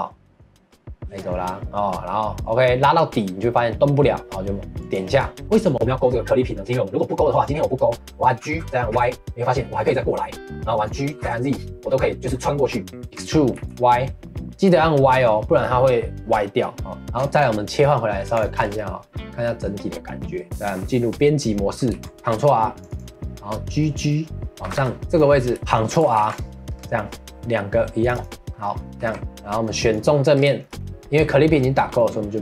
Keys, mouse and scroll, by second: 5.1 scroll down 1, 5.4-6.6 middle drag, 7.3 click, 8.4 g, 17.0 middle click, 17.2 Tab, 17.8-18.3 middle drag, 18.3 click, 18.5 scroll down 2, 18.7-20.4 middle drag, 20.4 Tab, 20.7 middle click, 21.1-21.9 scroll up 1, 21.9 ctrl+r, 24.0 middle click, 24.6 g, 25.6 middle click, 26.1 ctrl+r, 28.4 middle click, 29.0 3, 29.9 click, 30.3 scroll down 2, 30.6-32.4 shift+middle drag.